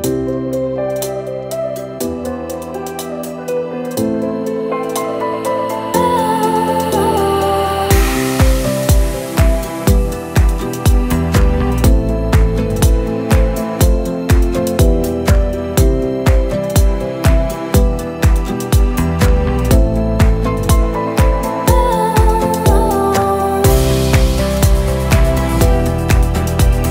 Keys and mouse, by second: 0.0-3.5 typing, 2.3 right click, 2.6 Delete, 3.1 click, 3.6 right click, 4.4 right click, 4.8 middle click, 4.9 right click, 5.0-8.5 typing, 5.3 middle click, 5.8 right click, 5.8 middle click, 6.6 click, 7.0 Delete, 7.9 Tab, 8.5 Tab, 8.8 click, 9.7 ctrl+z, 9.9-12.2 typing, 11.2 right click, 11.4 middle drag, 12.2 click, 13.1 middle click, 13.5 right click, 13.6 middle click, 13.8-14.2 right drag, 14.6 Delete, 14.8 middle click, 15.2 z, 15.5 right click, 15.8 s, 15.9 z, 16.2 click, 16.9-19.3 typing, 19.3 Tab, 19.9 click, 21.2 click, 21.3 shift+right click, 21.5 Delete, 21.8 click, 22.0 click, 22.0 ctrl+z, 22.1 ctrl+z, 22.7 ctrl+z, 23.3 Delete, 24.1 click, 24.4 ctrl+z, 24.5 s, 24.6 click, 25.0 Delete, 25.2 click, 25.3 click, 25.5 click, 25.9 alt+m, 26.1 click, 26.2-26.9 typing, 26.5 alt+m, 26.6 Tab, 26.8 Tab.